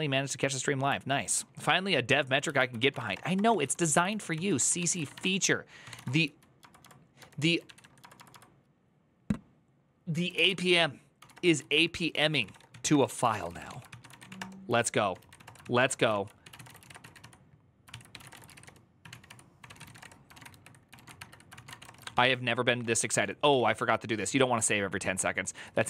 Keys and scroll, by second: 2.3 alt+{, 2.5-8.6 typing, 9.8-25.8 typing.